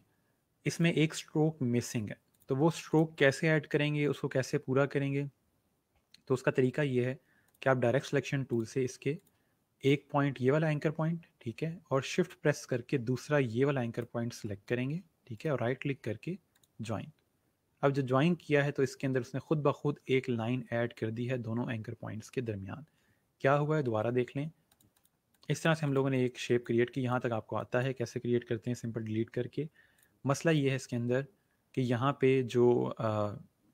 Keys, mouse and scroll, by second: 7.4 click, 13.8 click, 15.2 right click, 16.5 click, 23.7 ctrl+z, 24.6 click, 29.9 click.